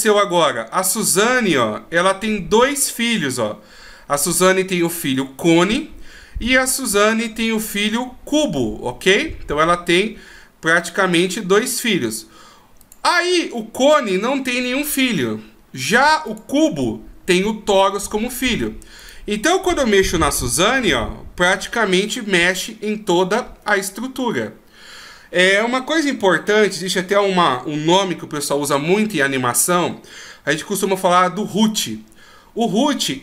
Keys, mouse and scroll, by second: 1.0 click, 12.8 click, 16.3 click, 19.0 right click, 20.3 g.